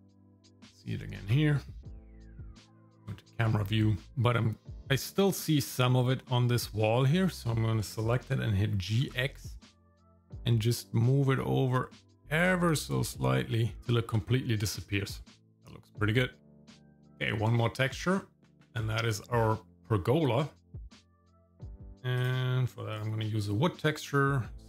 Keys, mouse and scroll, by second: 0.0 click, 0.5 scroll down 4, 0.7 shift+middle click, 2.2 shift+middle click, 3.1 KP_0, 4.0 ctrl+click, 7.0 click, 8.7 g, 15.2 ctrl+click, 16.7 shift+middle click, 16.9 shift+middle click, 17.5 shift+middle click, 18.1-18.9 scroll down 4, 19.1 middle click, 19.4-20.5 scroll up 2, 21.1 click, 21.7 scroll down 4, 22.2 click, 22.9 click.